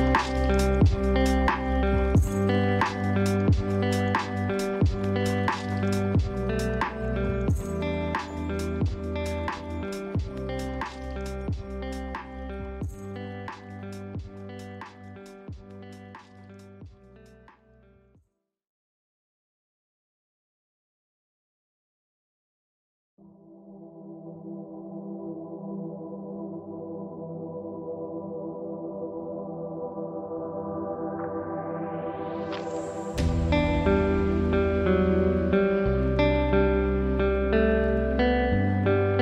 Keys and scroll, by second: 3.0 ctrl+g, 15.4 ctrl+d, 17.6 ctrl+shift+[, 18.4 ctrl+shift+], 19.0 ctrl+[, 22.0 ctrl+shift+], 31.5 ctrl+space, 34.6 ctrl+c, 37.3 ctrl+v, 38.6 ctrl+space.